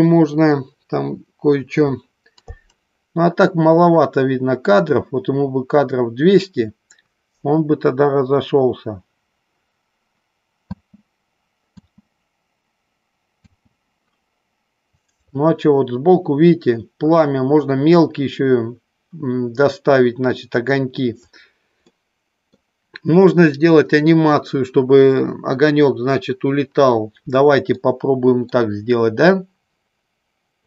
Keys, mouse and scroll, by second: 11.1 space, 12.1 space, 13.7 space, 21.9 middle click, 28.1-28.8 shift+middle drag.